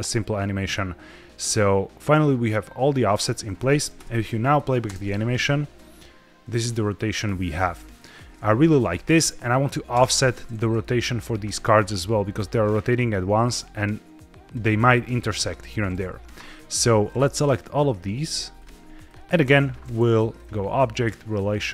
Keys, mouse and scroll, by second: 3.9 KP_0, 4.6-6.8 scroll down 2, 4.7 space, 9.8 space, 10.4-10.7 middle drag, 10.7-11.2 scroll down 1, 11.7-14.4 drag, 17.3 shift+click, 17.9 shift+click, 19.0 shift+click, 20.2-21.7 drag.